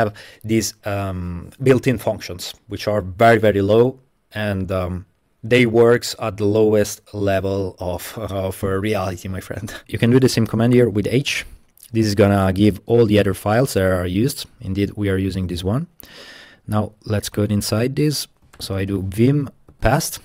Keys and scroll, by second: 9.8 Left, 9.8 BackSpace, 10.8 shift+h, 11.3 Return, 17.4 super+c, 18.3-19.1 typing, 19.7 super+v.